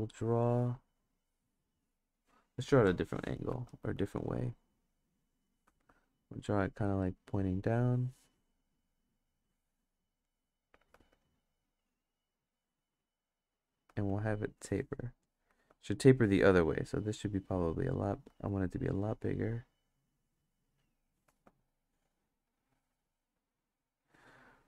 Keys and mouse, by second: 0.1 click, 1.1 click, 3.2 ctrl+z, 3.5 ctrl+z, 3.8 ctrl+z, 5.0 click, 5.7 ctrl+z, 6.2 click, 7.6 click, 9.2-10.2 drag, 10.9 ctrl+z, 11.7-13.5 drag, 13.9 ctrl+z, 14.4 click, 15.5 ctrl+z, 17.4 click, 18.3 ctrl+z, 18.9-21.0 drag, 21.3 ctrl+z, 21.8-23.9 drag.